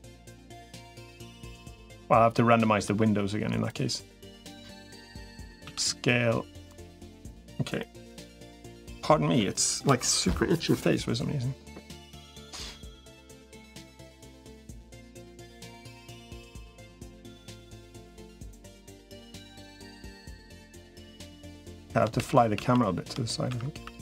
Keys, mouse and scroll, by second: 1.4 shift+middle click, 1.8 middle click, 3.6-5.2 drag, 5.4 s, 13.1 middle click, 13.7 shift+middle click, 14.6-15.6 middle drag, 16.2-18.2 drag, 22.0 shift+f.